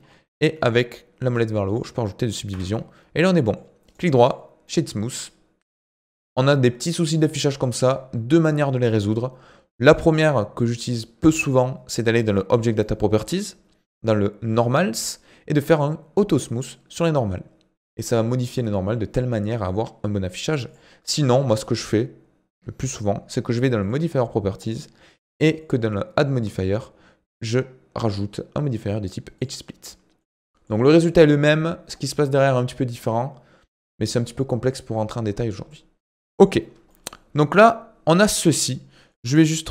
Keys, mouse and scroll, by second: 2.5 Tab, 2.7-3.9 middle drag, 3.9 right click, 4.7-9.2 middle drag, 9.7-12.8 drag, 14.5-16.4 drag, 20.7 click, 23.8 click, 25.6-30.2 drag, 30.2-33.4 middle drag, 34.0-36.7 middle drag, 36.7 scroll down 2, 36.9-39.7 middle drag.